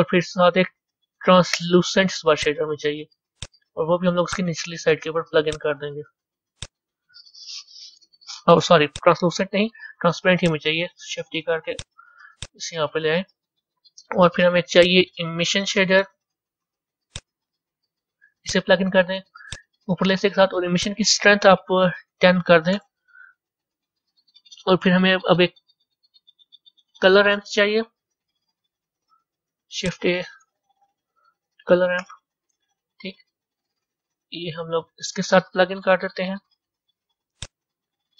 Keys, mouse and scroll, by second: 4.9-8.9 drag, 9.7 Delete, 10.3 click, 11.0 shift+d, 13.3-15.3 drag, 15.3 shift+a, 19.4 click, 22.2-24.9 drag.